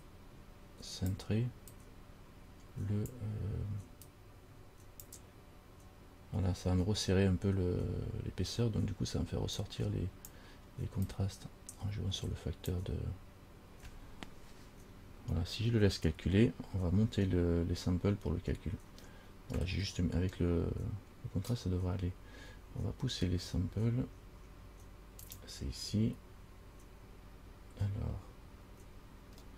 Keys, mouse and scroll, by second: 0.2 click, 2.0 click, 4.2 click, 9.9 click, 11.3 click, 25.4 click.